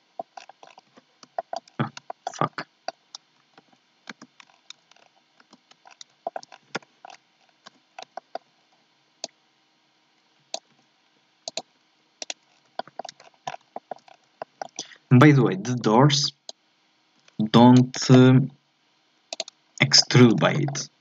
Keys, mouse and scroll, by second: 0.3-0.7 scroll down 9, 0.9 z, 1.4 shift+middle click, 1.7-2.1 scroll up 1, 2.1 shift+middle click, 2.4 scroll up 2, 2.6-3.6 middle drag, 3.6 ctrl+z, 4.1 ctrl+z, 4.5 scroll down 4, 4.9 scroll up 2, 5.4 ctrl+z, 5.9-6.2 scroll down 2, 6.2 shift+middle click, 6.8 KP_7, 7.1-8.2 scroll up 8, 7.7 z, 8.2 shift+middle click, 8.5 scroll up 1, 9.2-10.7 drag, 10.7 e, 12.2 right click, 12.5 scroll down 1, 12.8 shift+middle click, 13.0 shift+scroll up 1, 13.2-13.5 scroll down 9, 13.7 shift+middle click, 14.0 scroll up 3, 14.4 shift+middle click, 15.1-15.4 shift+scroll down 3, 15.4-16.5 shift+middle drag, 16.5-18.4 drag, 18.4 e, 19.7 shift+middle click, 20.2 scroll up 4, 20.5-21.0 shift+middle drag.